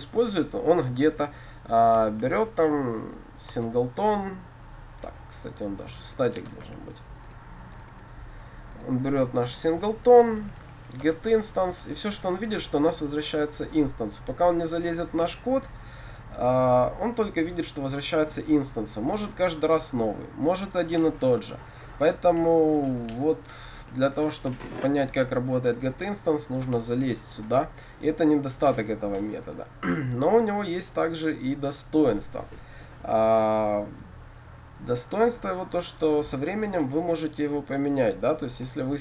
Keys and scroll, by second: 2.2 ctrl+c, 3.6 Return, 11.1 Return, 27.2 ctrl+b.